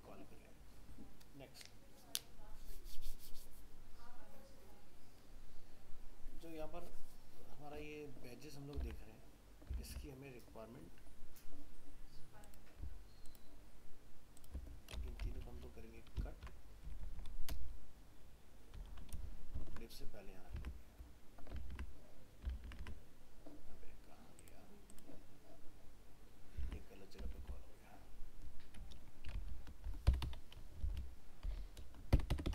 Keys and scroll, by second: 8.8 alt+Tab, 16.1 ctrl+x, 20.6 alt+Tab, 26.6 alt+Tab.